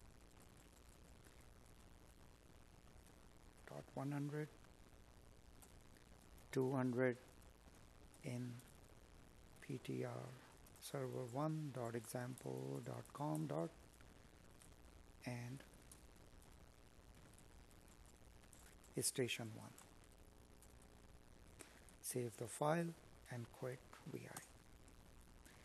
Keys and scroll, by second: 3.4 space, 6.6 space, 10.8 Escape, 16.8 Escape.